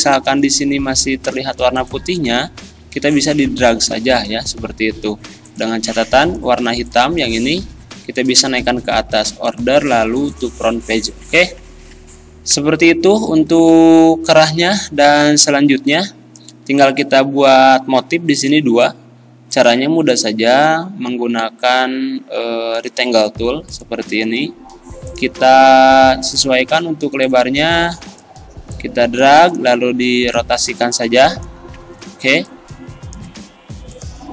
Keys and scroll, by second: 7.8 ctrl+z, 15.6 z, 33.4 ctrl+z.